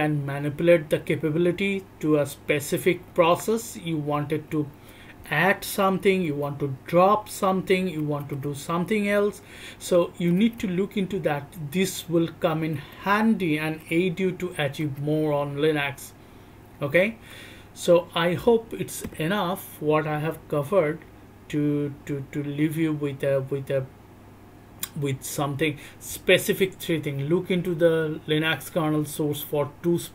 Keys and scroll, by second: 0.0-3.3 typing, 0.2 alt+o, 0.2 alt+o, 1.1 alt+o, 2.1 alt+o, 2.8 alt+o, 3.3 alt+o, 4.5 alt+o, 4.5-10.8 typing, 5.2-6.0 alt+o, 6.6-7.5 alt+o, 8.0-9.0 alt+o, 9.6 alt+o, 10.2 alt+shift+o, 10.8 alt+o, 10.8 alt+o, 12.4 b, 13.8 b.